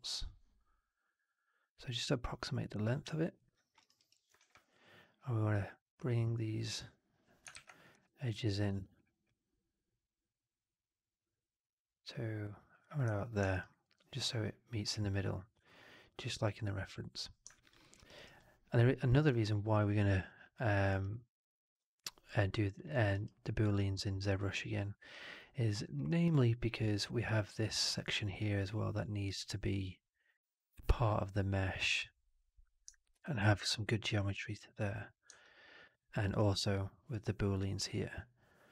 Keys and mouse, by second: 3.1-3.6 alt+middle drag, 3.7 alt+middle click, 3.9 alt+middle click, 4.3 1, 5.4-7.3 drag, 7.4 shift+x, 7.8 4, 8.6 1, 9.2-12.7 drag, 13.0 4, 13.4 right drag, 13.6-17.1 drag, 17.4 alt+drag, 17.7 alt+middle drag, 17.9 alt+right drag, 18.0 alt+right click, 18.3-19.1 alt+drag, 19.9-20.4 alt+drag, 20.6 alt+middle click, 20.8 alt+right click, 21.0-22.2 alt+drag, 22.4 alt+drag, 22.8 alt+middle drag, 23.0 alt+right drag, 23.2-23.6 alt+drag, 23.7 alt+middle drag, 23.9 alt+right click, 24.3 alt+click, 25.7 alt+middle drag, 26.0 alt+right drag, 26.4 alt+click, 32.9 alt+middle click, 33.3-33.6 alt+right drag, 35.3-36.2 alt+drag.